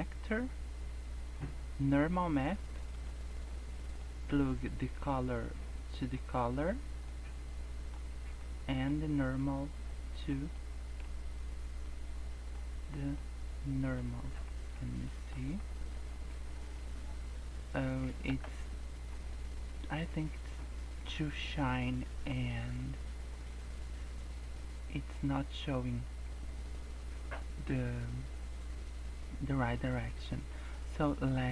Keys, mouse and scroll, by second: 3.5 click, 4.8 click, 7.1 click, 8.4 click, 9.5 click, 10.5 middle click, 11.9 click, 13.2 click, 14.3-14.8 scroll up 4, 15.1 shift+middle click, 15.5 scroll down 4, 16.0 Tab, 16.1 scroll up 2, 18.3 KP_0, 18.9 scroll up 1, 19.8 scroll up 2, 20.5 scroll up 3, 26.2 scroll down 3, 29.6-29.9 scroll down 2, 30.0-30.5 scroll up 3, 30.8 scroll down 2, 31.1 scroll up 1.